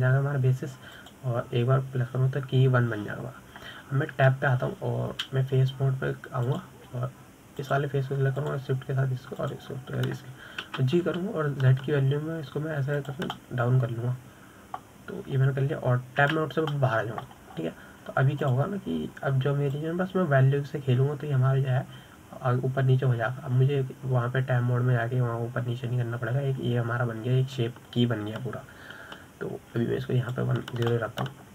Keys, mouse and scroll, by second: 0.8-6.5 drag, 6.5 Tab, 8.8-10.1 drag, 10.8 shift+click, 11.8 shift+click, 13.0 g, 15.7-18.6 middle drag, 18.6 Tab, 19.1-20.0 middle drag, 20.0-20.8 scroll down 3, 20.8 click, 22.1-25.2 drag.